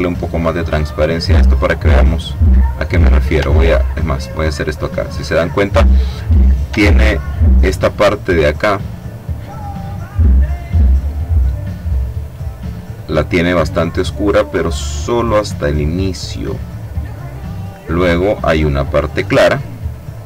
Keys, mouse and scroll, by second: 0.0-1.5 drag, 2.9 click, 3.8-6.2 ctrl+drag, 6.9-9.0 drag, 9.2 click, 10.9 click, 12.9 click, 13.9-16.7 drag, 18.2 click, 19.8 click.